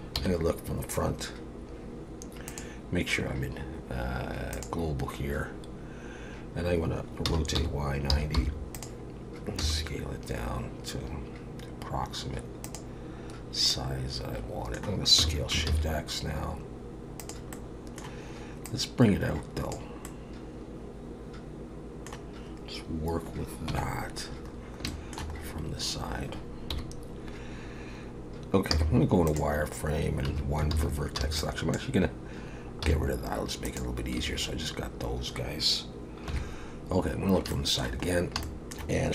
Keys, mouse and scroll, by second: 0.2 KP_1, 2.5 click, 7.3 r, 9.6 s, 13.7 middle click, 15.2 s, 17.5 middle click, 18.6 click, 20.0 middle click, 23.7 KP_3, 24.4 scroll up 3, 24.9 shift+middle click, 25.4-26.7 scroll up 1, 26.7 scroll up 1, 26.7 KP_1, 28.7 z, 30.3 1, 30.7 alt+a, 31.2 b, 32.8 x, 34.2 a, 36.3 KP_3, 37.2 scroll up 1, 37.5 shift+middle click, 38.1 scroll down 1, 38.4 shift+middle click.